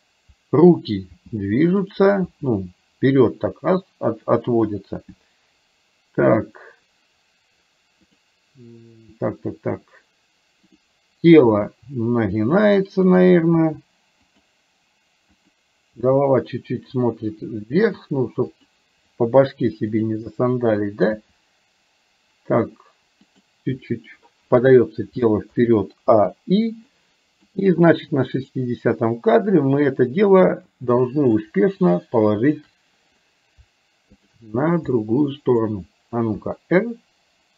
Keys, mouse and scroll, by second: 1.3 g, 2.4 g, 10.8 click, 11.5 r, 13.5 r, 15.4 click, 16.0 r, 20.0 click, 21.3 g, 25.5 a, 26.2 i, 26.9 middle click, 28.5 click, 31.0 middle click, 34.4 shift+click, 34.9 middle click, 36.4 r.